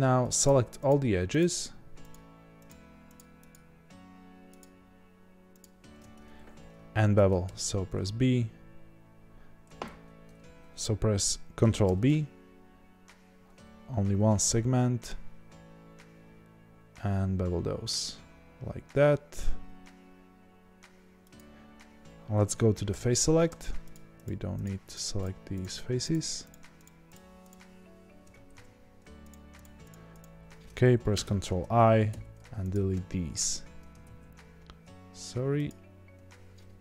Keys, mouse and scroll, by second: 7.4 ctrl+b, 9.9 `, 11.8 ctrl+b, 22.9 3, 23.9 shift+click, 29.3 shift+click, 31.2 ctrl+i, 32.7 x, 34.0 ctrl+z, 35.6 shift+click.